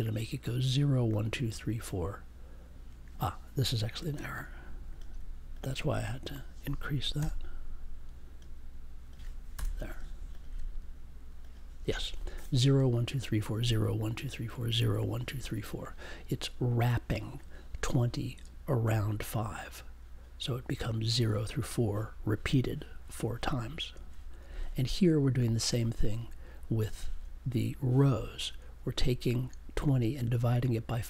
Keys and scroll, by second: 7.1 4, 9.5 BackSpace.